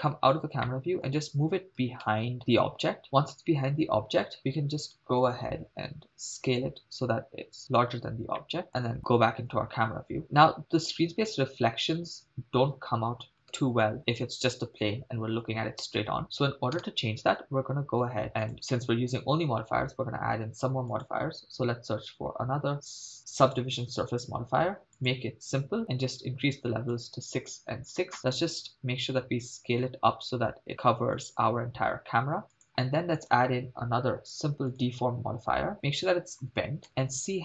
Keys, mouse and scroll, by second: 0.7 middle click, 1.9 g, 2.0 y, 3.0 click, 6.3 s, 7.7-8.5 drag, 8.6 middle click, 8.7 KP_0, 13.5 KP_0, 16.8 KP_0, 18.4 click, 21.1-23.7 drag, 25.1-27.0 drag, 27.4 click, 29.0-29.7 scroll down 3, 30.0 s, 32.6 click, 33.2-34.9 drag, 35.7 click, 36.9 KP_0, 37.2 scroll down 3.